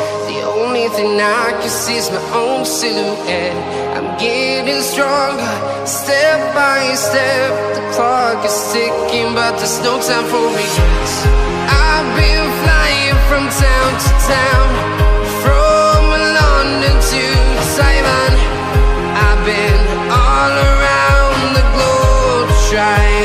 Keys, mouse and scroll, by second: 1.9-5.6 typing, 6.1 click, 12.0 click, 14.5 Delete, 15.4 click, 18.8 click, 21.1 click.